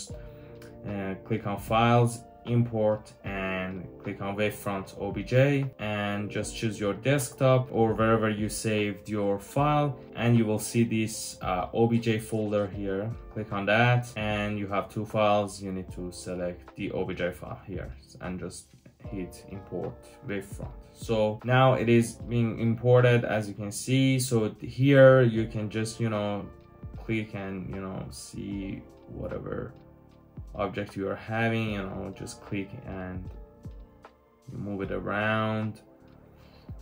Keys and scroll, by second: 17.7-18.1 typing, 26.1 typing, 27.5-27.9 typing, 33.1 typing, 36.3 typing.